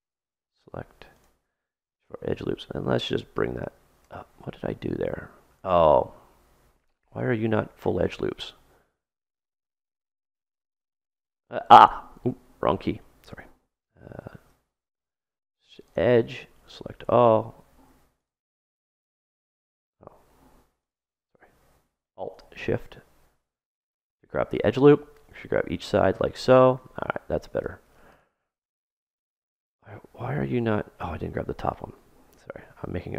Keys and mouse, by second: 2.0-3.8 drag, 2.1 middle click, 2.1 right click, 4.8 ctrl+z, 5.5 ctrl+z, 6.0 ctrl+z, 6.4 ctrl+z, 7.1-10.1 middle drag, 10.4 super+right click, 10.8 super+middle click, 11.8 super+right click, 11.9 super+middle click, 12.6 super+right click, 15.1 ctrl+Tab, 16.3 a, 18.1 right click, 20.7-25.9 right drag, 24.7 click, 25.8 middle click, 26.6-28.1 middle drag, 28.1-29.7 drag, 32.2 ctrl+z.